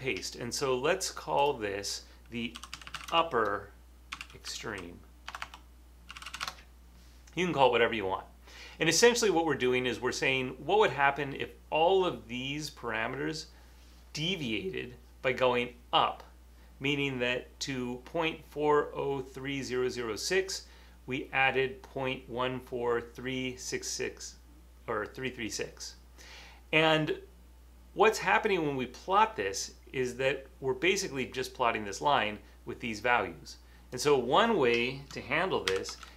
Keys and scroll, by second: 2.5-9.2 typing, 35.8 shift+-.